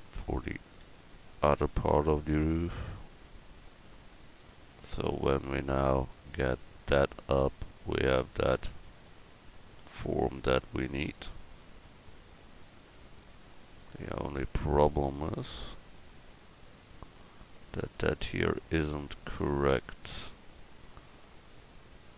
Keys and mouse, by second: 1.6 ctrl+r, 3.6 click, 15.4 middle click.